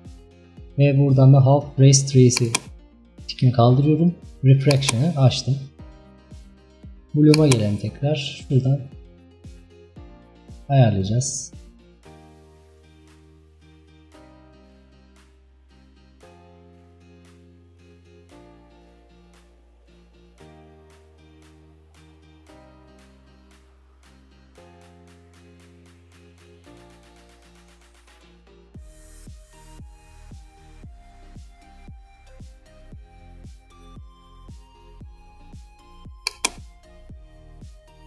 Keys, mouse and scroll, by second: 2.4 click, 4.7 click, 8.4-38.0 drag.